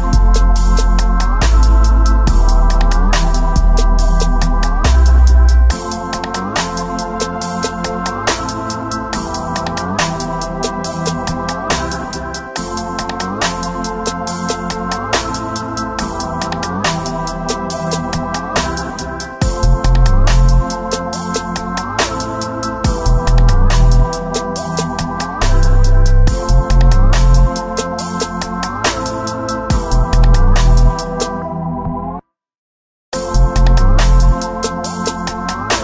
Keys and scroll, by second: 4.4 space, 5.6 space, 5.9 space, 6.3 space, 6.6 space, 7.9 ctrl+z, 9.5 space, 10.6 space, 12.5 alt+space, 16.5 space, 19.4 ctrl+s, 21.5 space, 26.5-28.1 typing, 28.7 ctrl+z, 29.9 ctrl+z, 30.1 ctrl+z, 30.4 space, 30.7 space, 31.0 space, 33.1 space, 34.1 alt+space, 34.9 space, 35.3 space.